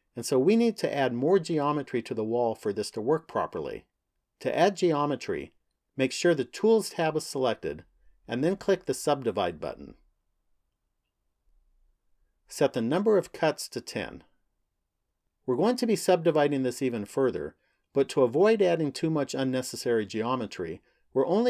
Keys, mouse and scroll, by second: 7.7 click, 9.9 click, 12.5 click.